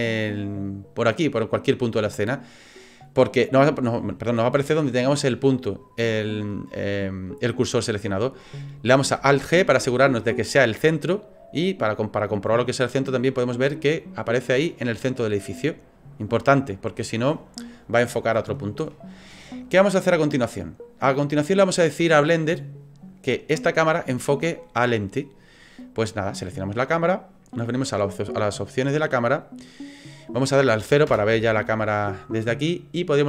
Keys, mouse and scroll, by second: 0.6 click, 2.4 middle click, 9.6 alt+g, 11.9 click, 13.6 middle click, 19.4 click, 26.9 click, 29.0 click, 31.1 KP_0.